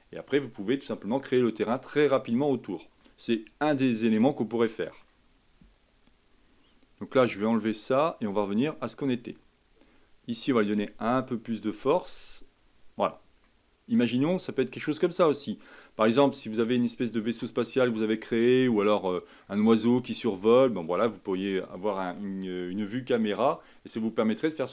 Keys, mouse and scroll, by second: 1.6-3.9 middle drag, 3.9 scroll down 2, 4.1 scroll up 1, 4.3-7.4 middle drag, 8.2 click, 10.4-13.4 drag, 13.4-16.4 middle drag, 17.2-20.3 middle drag, 20.6-23.7 middle drag.